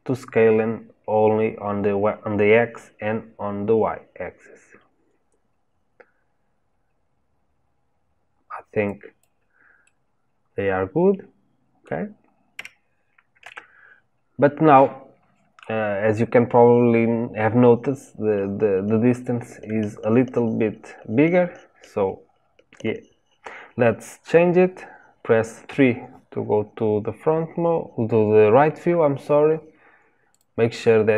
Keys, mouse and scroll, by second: 9.8-12.5 middle drag, 12.5 Tab, 13.4 Tab, 25.6 KP_3, 30.2-31.1 drag.